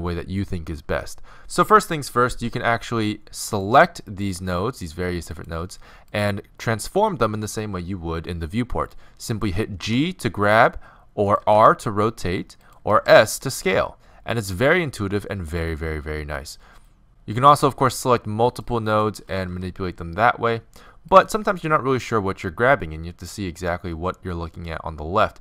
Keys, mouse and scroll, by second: 3.7-5.3 drag, 5.3-7.9 right drag, 9.9 g, 11.6 r, 13.0 s, 17.8-19.6 drag, 19.6-20.6 right drag, 19.6 g, 20.6 click.